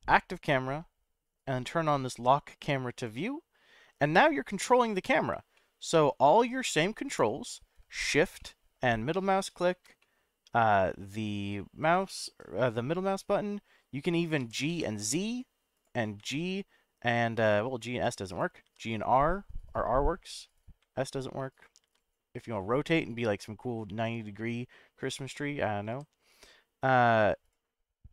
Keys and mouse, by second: 2.9 click, 4.2-5.2 middle drag, 5.5-6.6 shift+middle drag, 8.4-9.8 shift+middle drag, 10.0-13.7 middle drag, 14.4 g, 14.7 z, 15.7 click, 16.2 s, 18.3 right click, 18.6 r, 20.5 right click, 20.8 s, 21.5 right click, 21.8 r, 25.0 right click, 25.9 g, 27.4 click.